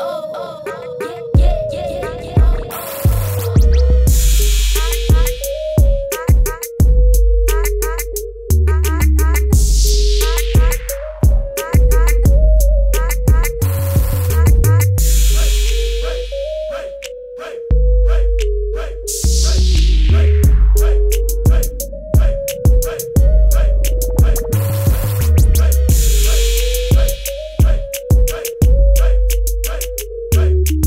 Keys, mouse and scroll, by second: 1.6 F9, 2.5 click, 5.4 right click, 8.8 F9, 9.6 click.